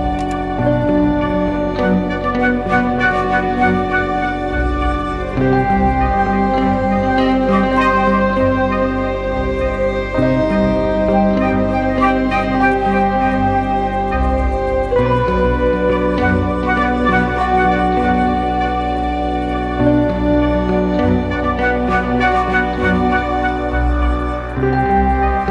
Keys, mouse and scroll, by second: 9.8 double click, 23.9 double click.